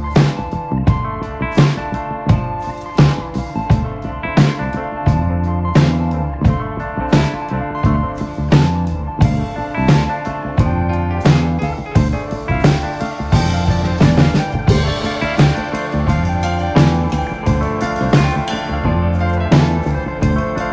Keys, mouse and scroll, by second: 0.1 Tab, 0.5 click, 1.1 click, 1.5 g, 2.4 click, 2.6 g, 3.4 click, 3.5 g, 4.7 click, 4.9 g, 5.6 click, 5.7 g, 6.6 click, 6.7 g, 7.2 click, 7.3 g, 7.9 click, 8.0 g, 9.4 scroll down 2, 9.6-10.6 middle drag, 10.6-11.3 scroll up 1, 11.3 KP_1, 11.7 click, 12.6 middle click, 13.2 KP_7, 13.8 s, 15.8 ., 16.4 s, 18.1 KP_3, 18.7 /, 18.9 scroll down 1, 19.1-20.1 middle drag, 20.1 s.